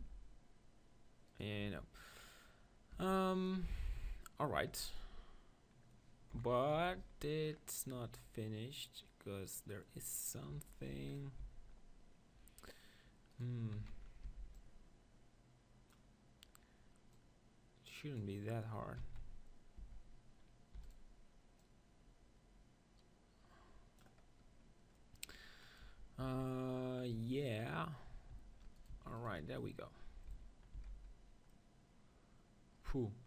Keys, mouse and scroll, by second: 0.0 ctrl+r, 1.6 Tab, 2.9 Tab, 4.6 KP_1, 6.3 KP_7, 6.8 Tab, 6.9 z, 7.4 middle click, 10.5 KP_1, 10.9 Tab, 11.4-13.3 middle drag, 12.2 z, 13.3-15.1 right drag, 13.8 z, 14.3 b, 15.2 middle click, 17.1-19.1 drag, 19.1 Tab, 19.2 z, 19.8 Tab, 20.7 e, 20.9-23.4 right drag, 21.6-22.8 drag, 24.4-27.1 middle drag, 25.9 Tab, 26.2 Tab, 28.8-30.7 drag, 29.6 middle click, 30.7-33.0 middle drag, 30.7 z.